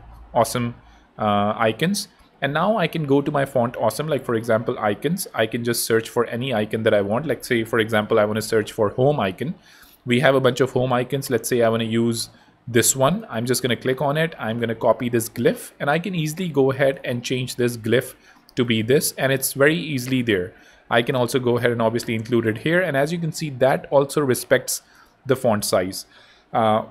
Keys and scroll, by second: 1.2 Home, 3.2 super+2, 7.0-8.3 typing, 15.2 super+i, 17.6 super+v, 18.7 ⟲, 18.9 BackSpace, 20.1 super+c, 21.3 super+v, 25.9 BackSpace.